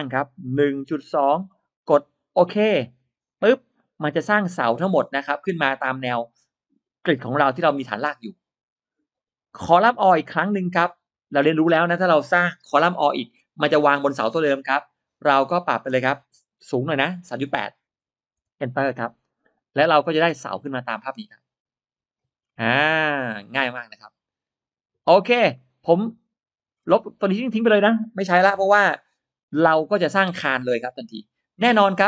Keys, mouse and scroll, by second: 0.6 1, 1.1 2, 2.7 click, 3.4 scroll down 1, 3.7-5.7 middle drag, 9.5 click, 10.6 click, 15.3 click, 16.5 3, 17.3 8, 18.2 Return, 19.4-20.1 scroll down 1, 20.0-21.9 middle drag, 22.2-22.5 scroll up 1, 25.1-25.4 scroll down 1, 25.4 middle click, 25.6-25.9 scroll up 1, 25.9 middle click, 26.1 scroll down 1, 26.7 space, 26.9 click, 27.0 space, 28.4 Delete.